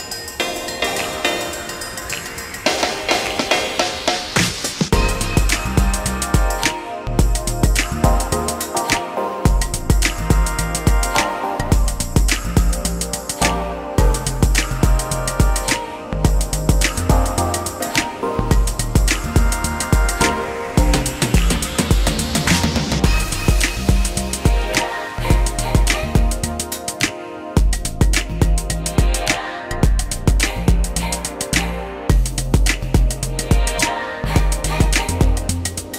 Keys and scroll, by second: 2.1 space, 14.1 space, 21.8 ctrl+z, 25.1 ctrl+z, 30.7 l, 33.0 space, 34.0 p.